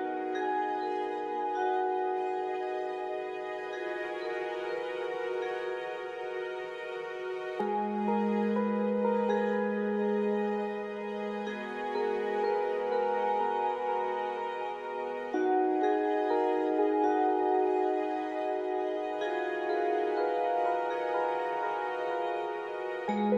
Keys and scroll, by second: 12.5-15.0 typing, 15.0 Return, 16.2-19.0 typing, 20.2-21.6 typing, 23.0 typing.